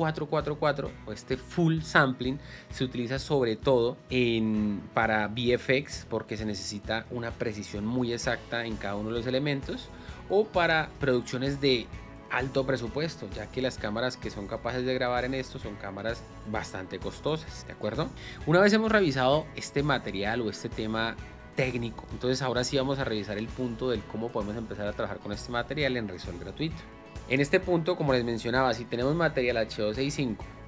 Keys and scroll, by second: 18.2 Escape.